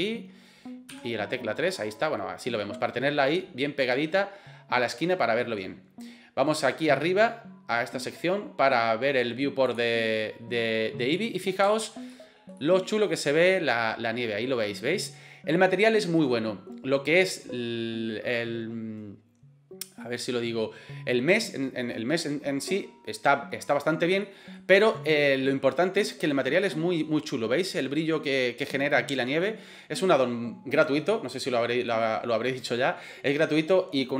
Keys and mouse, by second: 0.9 KP_3, 1.7-2.6 middle drag, 3.4-5.6 middle drag, 11.2 middle click, 11.8 shift+middle click, 12.1 middle click, 12.6 middle click, 24.3 middle click, 27.0-28.1 middle drag, 28.7 middle click, 29.2 middle click.